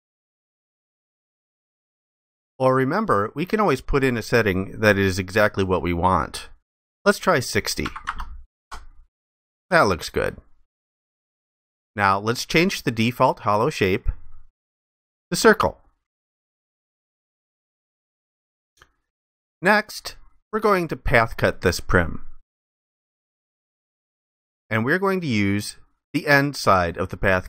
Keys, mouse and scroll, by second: 7.8 typing, 8.6 Return.